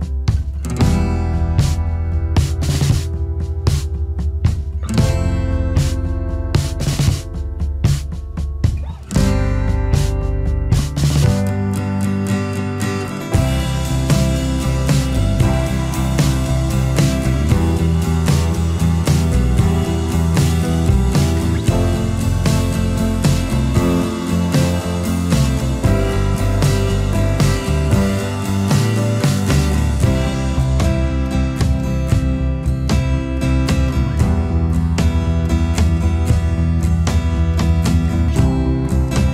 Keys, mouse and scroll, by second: 7.1 space, 16.6 alt+scroll up 1, 17.1 space, 18.2 alt+scroll up 1, 22.8 alt+scroll down 1, 23.1 space, 26.1 alt+scroll up 1.